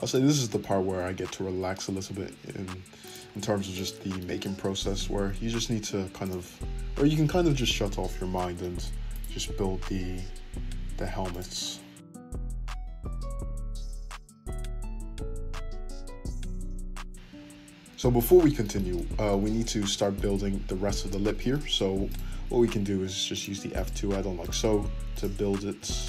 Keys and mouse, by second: 0.0 click, 0.9 f, 3.7 click, 4.6 f, 9.1 click, 9.8 f, 12.1 click, 13.3 f, 14.4 `, 15.7-22.0 shift+middle drag, 16.7 ctrl+z, 22.0 click, 22.1-23.7 middle drag, 22.9 f, 23.7 click, 23.8-25.1 middle drag, 24.1 f, 25.1 click, 25.2-26.0 middle drag, 25.7 f.